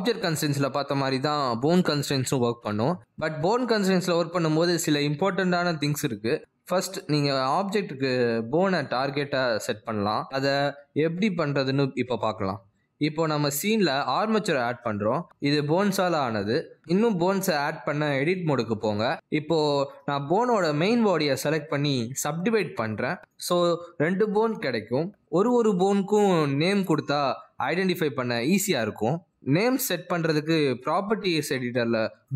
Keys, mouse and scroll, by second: 16.5 click, 21.6 right click, 25.6 click, 26.3 click, 27.7-28.0 scroll up 2, 30.0 click.